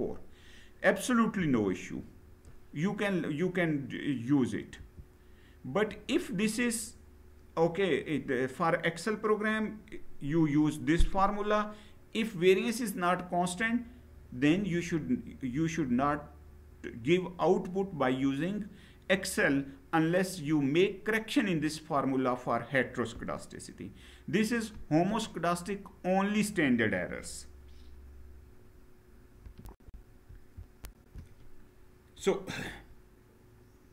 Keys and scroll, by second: 4.6 Down, 29.5 shift+F9.